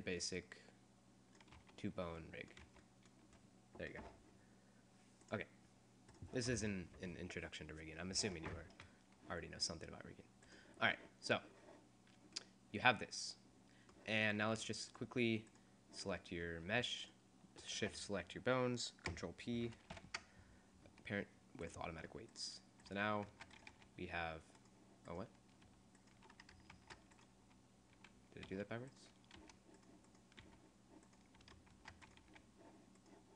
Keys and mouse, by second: 1.7 z, 2.7 z, 10.6-12.4 right drag, 12.4-13.6 middle drag, 13.6 click, 15.0-16.8 right drag, 20.2 ctrl+p, 22.4-23.7 right drag, 23.3 ctrl+Tab, 23.7 r, 26.9 ctrl+Tab, 28.5 r, 28.8 right click, 29.5 g, 30.1 right click, 30.5 g, 31.9 ctrl+Tab, 32.3 r.